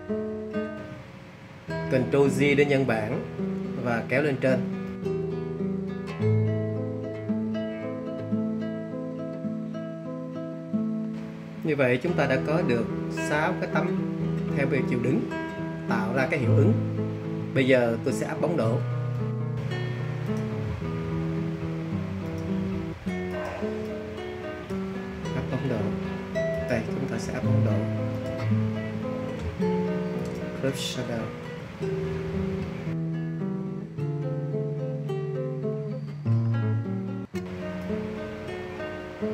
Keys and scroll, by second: 0.4 super+j.